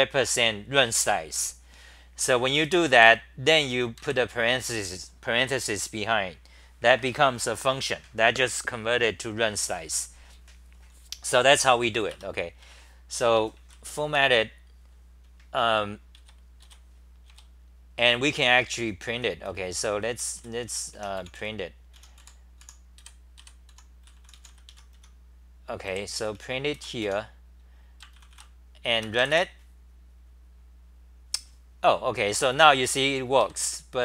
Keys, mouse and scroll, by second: 2.2-3.6 typing, 4.0 ctrl+g, 11.3 n, 12.1 Return, 13.9 c, 16.2 `, 17.3 `, 18.9-23.7 typing, 24.7 Home, 25.0-27.5 typing, 28.3 ctrl+c, 33.4 ctrl+g, 33.6-34.0 typing.